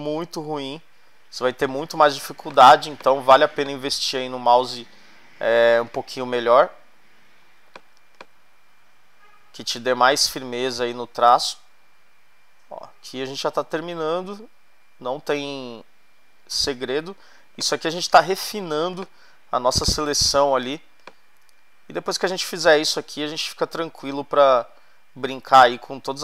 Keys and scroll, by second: 2.4 space, 18.1 space.